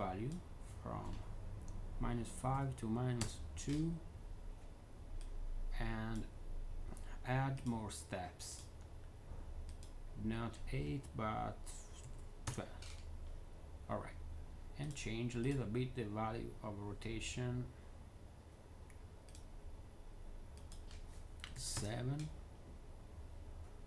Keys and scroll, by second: 2.4 2, 3.1 Return, 11.9 1, 12.3 Return, 12.3 2, 14.2-14.9 typing, 21.4 7, 21.6 Return.